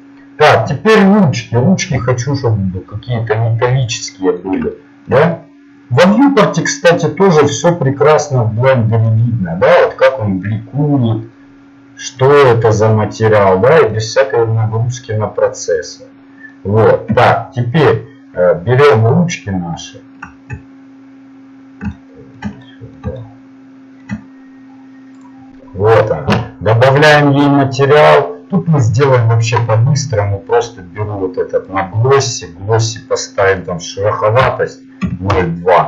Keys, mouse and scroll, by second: 2.2 click, 3.6-5.6 middle drag, 12.9-15.0 middle drag, 17.1 KP_Divide, 23.6 middle click, 23.8 middle click, 24.0 middle click, 25.2-29.1 right drag, 29.1 click, 33.8-35.3 drag.